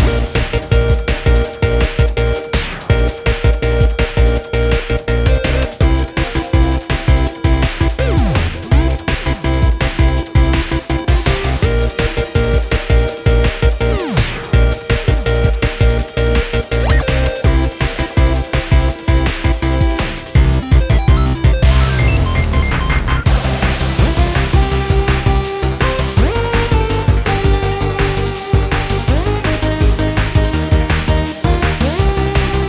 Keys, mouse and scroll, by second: 0.0-1.2 drag, 1.2 middle click, 1.8-2.2 scroll up 1, 2.2 middle click, 2.8 click, 3.3 scroll up 1, 3.4-5.2 middle drag, 5.2 click, 6.0-9.0 middle drag, 9.6-11.1 middle drag, 11.1 click, 11.6-12.5 scroll down 2, 12.5 click, 13.6-16.7 middle drag, 19.2 scroll down 2, 19.5 scroll up 2, 19.8-20.3 scroll down 3, 20.3 KP_0, 21.2 click, 21.9 r, 27.6 click, 28.0-28.7 scroll down 1, 28.7 click, 29.0-29.5 scroll up 2, 29.5 s, 31.3 click, 31.9 click, 32.4 g.